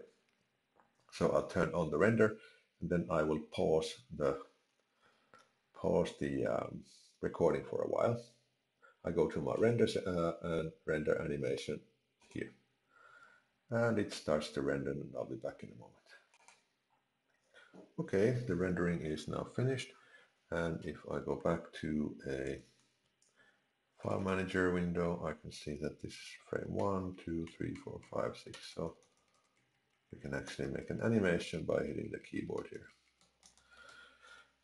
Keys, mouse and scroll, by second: 9.5 click.